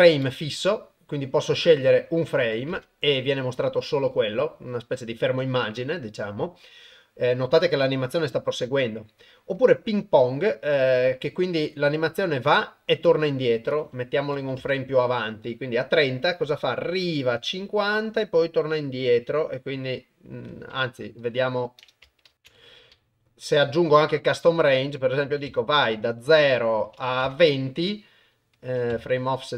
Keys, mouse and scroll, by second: 1.5-2.8 drag, 5.4-9.6 drag, 13.7 click, 23.8 click, 24.7 click, 25.9-27.3 drag, 28.6 click.